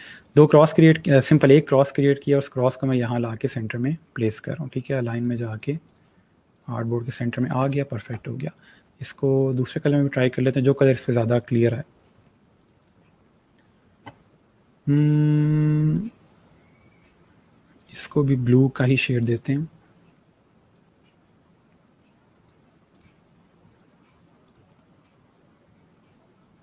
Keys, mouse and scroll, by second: 1.1 ctrl+g, 1.4 click, 7.5 space, 7.6 click, 8.9 click, 10.7 click, 13.1 click, 15.8 click, 17.7 click.